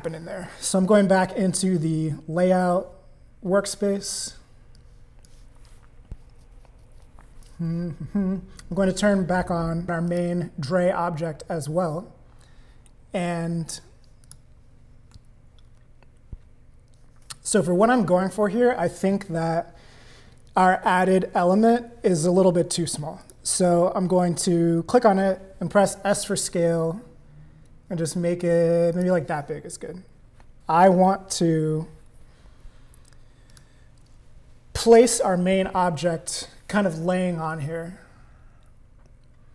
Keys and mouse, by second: 0.0 click, 4.7 click, 8.9 click, 10.1 click, 14.2 click, 23.2 click, 26.1 s, 33.5 click.